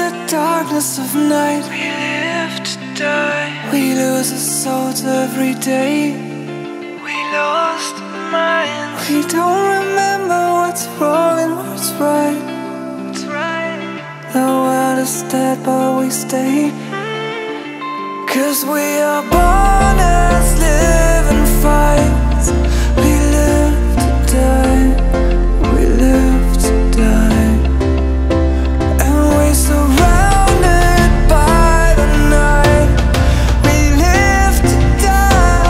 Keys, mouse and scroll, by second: 0.1 e, 0.8 r, 2.2 e, 3.5 v, 4.3 click, 5.2 e, 6.8 click, 8.2 e, 9.4 e, 11.3 click, 12.1 shift+middle click, 14.2 r, 15.1 r, 17.5 shift+click, 17.7 f, 18.1 click, 18.2 scroll up 2, 18.4 shift+middle click, 18.7 click, 19.1 s, 20.3-20.9 scroll down 4, 20.9 ctrl+s, 21.1-22.3 shift+middle drag, 22.3 click, 22.6 shift+d, 23.2 shift+r, 24.0 scroll up 1, 24.1 scroll down 1, 24.2 e, 25.8-26.3 scroll up 2, 26.3 click, 26.6 g, 28.5 click, 29.3 e, 30.0 r, 31.6 e, 32.5 r, 33.3 click, 33.4 click, 34.6-35.6 drag.